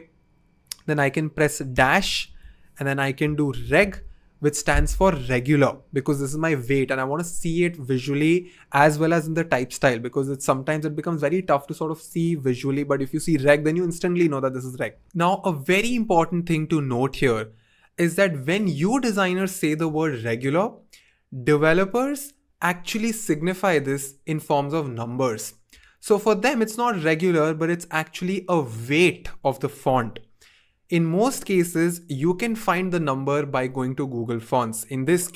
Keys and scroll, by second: 1.7 typing, 3.3-4.4 typing.